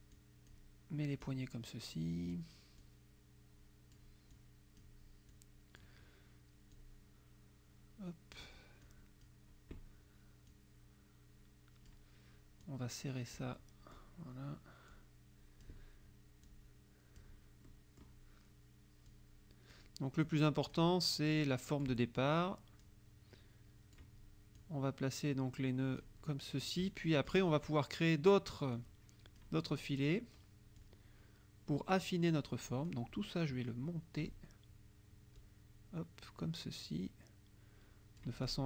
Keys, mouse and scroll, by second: 0.2 click, 1.3-2.6 drag, 2.9-4.2 drag, 4.4 click, 5.4 click, 6.8-8.6 drag, 8.9 click, 10.5-12.1 drag, 12.7 click, 15.0 click, 16.5 click, 17.8 click, 19.1 click, 20.3 click, 21.5 click, 22.9-24.2 drag, 24.6-26.3 drag, 27.0 click, 28.8 click, 30.8-32.2 drag, 32.9-34.4 drag, 35.4-38.6 drag.